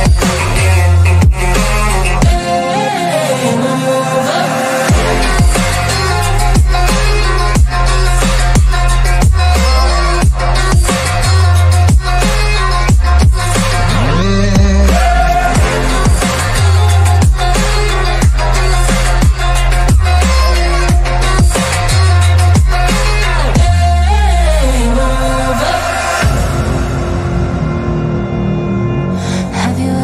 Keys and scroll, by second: 3.8 Delete, 4.9 F3, 5.2 Escape, 6.3 ctrl+z, 16.4 Escape, 16.5 F3, 16.9 Escape, 17.1 shift+F2, 17.2 Escape, 21.5 shift+F2, 23.6 F3, 25.1 F3, 25.5 Escape, 25.7 Delete, 26.3 F3, 26.7 Escape.